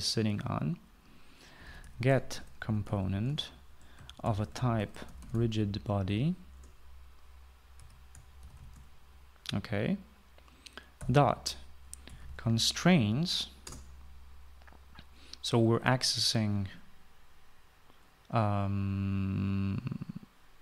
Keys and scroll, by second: 2.1-6.6 typing, 7.3 Return, 8.5 Right, 8.9-9.7 typing, 11.5-13.5 typing, 14.4 Return.